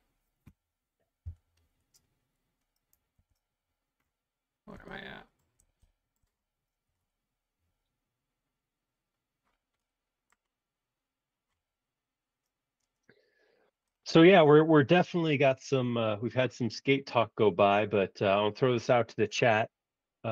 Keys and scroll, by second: 1.3 l, 3.1 super+1.